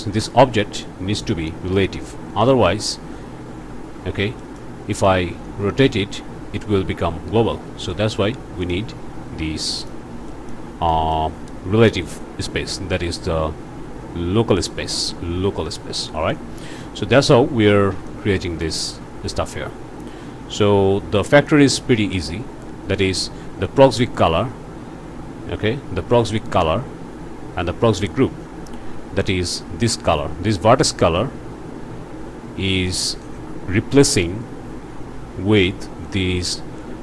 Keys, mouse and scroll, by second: 0.8 click, 2.5 click, 3.1 click, 4.4 click, 5.0 click, 6.8 r, 7.5 Escape, 7.9 click, 8.6 click, 9.8 click, 10.3 click, 10.9 click, 16.3-17.4 drag, 18.1-19.5 drag, 21.5 click.